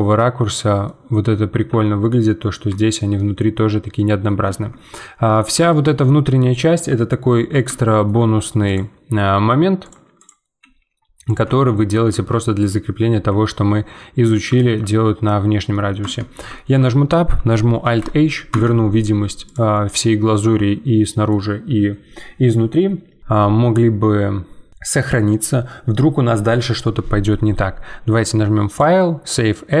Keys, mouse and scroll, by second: 0.4-0.9 scroll down 2, 0.9-3.7 middle drag, 3.7 scroll up 1, 3.9 middle click, 4.4 Tab, 5.2-5.6 scroll up 2, 5.6-7.0 shift+middle drag, 7.0 scroll up 2, 7.3-8.6 middle drag, 8.6 click, 9.1 g, 10.2 click, 10.6 g, 11.5 Tab, 11.8 scroll down 2, 12.1 Tab, 13.1 Tab, 13.4-15.5 middle drag, 15.5 scroll down 2, 15.7 middle click, 16.0 Tab, 16.5-17.8 shift+middle drag, 17.8 alt+h, 18.5 Tab, 19.1-19.4 scroll down 2, 19.4 click, 19.7-22.9 middle drag, 28.7-29.8 drag.